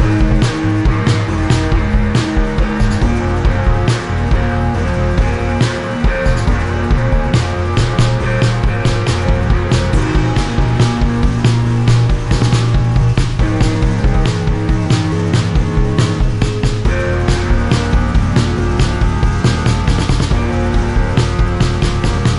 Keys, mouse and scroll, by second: 0.7 click, 3.3 shift+click, 6.3 shift+click, 8.2 shift+click, 10.9 click, 13.8 click, 16.7 right click, 17.6 click, 17.9 click, 19.3 click, 20.3 click, 21.2 click.